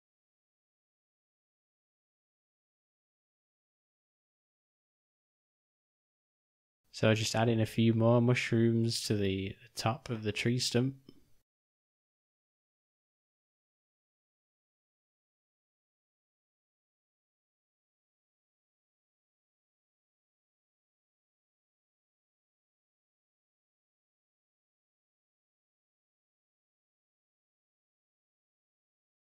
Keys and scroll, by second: 1.6 alt+d, 5.9 r, 7.1 s, 11.1 alt+d, 13.2 r, 15.5 g, 17.5 g, 18.9 r, 20.3 s, 23.5 s, 25.3 g.